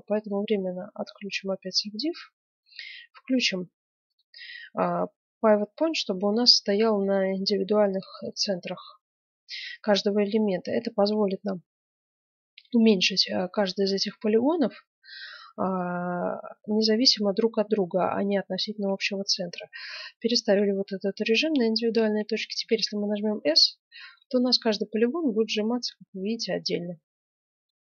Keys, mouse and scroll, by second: 0.1-1.8 drag, 1.2-2.8 middle drag, 4.0-5.8 drag, 14.2-16.2 middle drag, 22.5 s.